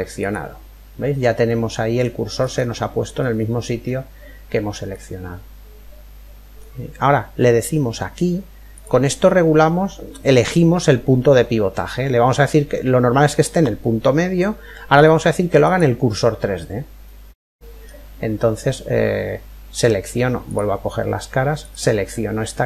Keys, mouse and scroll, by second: 2.0 middle click, 2.8 scroll up 1, 3.0-5.3 middle drag, 7.6 typing, 16.7-18.7 middle drag, 20.0 click, 21.2-22.6 right drag, 21.7-22.6 middle drag.